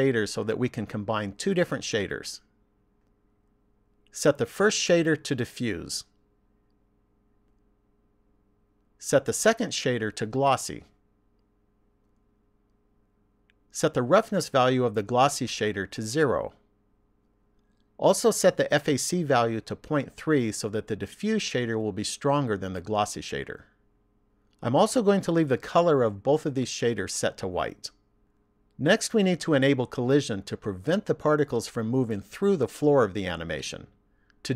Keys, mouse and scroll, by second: 1.6 click, 4.3 click, 10.2 click, 14.5 click, 18.5 click.